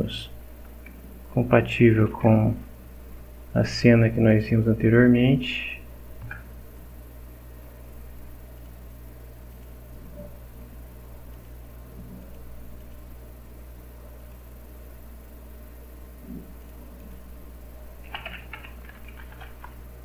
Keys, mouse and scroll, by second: 0.9-2.6 typing, 4.3 click, 5.6 click, 6.2 Return, 8.6 click, 9.5 click, 11.3 click, 12.2 click, 12.8 click, 14.2 click, 16.6 click, 17.0 click, 17.8-19.8 typing.